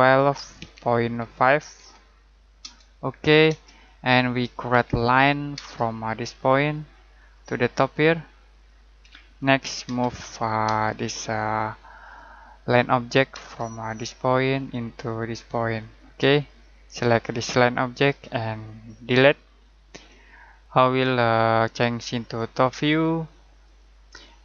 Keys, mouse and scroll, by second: 0.0-2.2 typing, 2.6 Return, 4.7-5.5 typing, 7.1 click, 9.0-10.6 typing, 12.0 click, 13.3 space, 14.5 click, 19.0 Delete, 22.7 click, 24.3 scroll down 1.